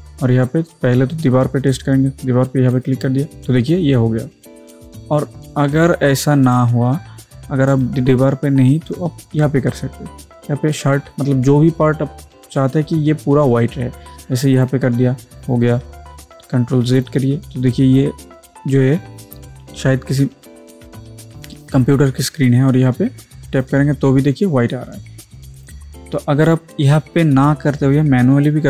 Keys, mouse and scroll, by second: 2.8 click, 7.7 alt+Num_Lock, 7.7 alt+click, 14.6 click, 16.8 ctrl+z, 23.5 click, 23.6 click.